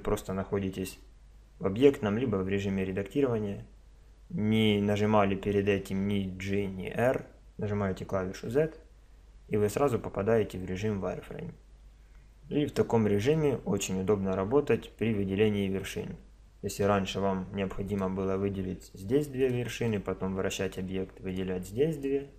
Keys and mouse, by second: 0.7 Tab, 2.1 Tab, 8.5 z, 12.8-14.7 middle drag, 16.9 z, 17.9 click, 18.8-19.9 right drag, 19.9-21.7 middle drag, 21.7-22.3 drag.